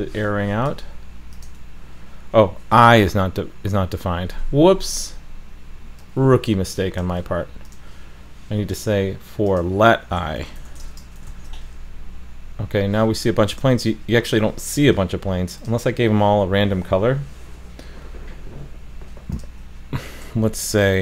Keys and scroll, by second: 2.8 super+=, 3.3 super+=, 11.3 super+s.